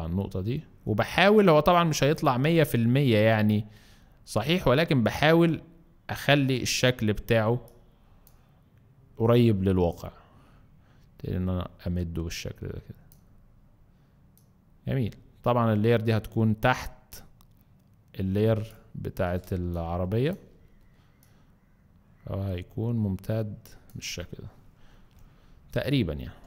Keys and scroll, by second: 19.5 space.